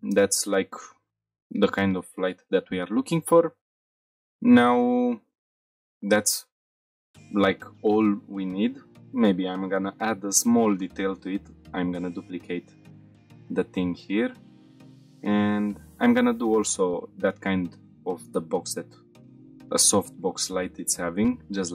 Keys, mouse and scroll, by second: 0.2 shift+middle drag, 0.6-0.9 middle drag, 1.0-1.5 scroll up 2, 1.7 shift+middle drag, 2.0 middle drag, 3.1 click, 3.6 scroll up 3, 3.9 shift+middle drag, 4.3-4.6 middle drag, 4.9-5.2 shift+middle drag, 6.8 middle click, 8.6 Tab, 9.2 middle click, 10.0 scroll down 1, 10.5 Tab, 11.3 shift+d, 11.7 right click, 13.1 Tab, 14.4 i, 15.9 click, 16.6 g, 16.7 z, 18.1 click, 18.6 i, 19.1 g, 19.1 z, 20.3 click, 20.5 Tab, 20.9 middle click.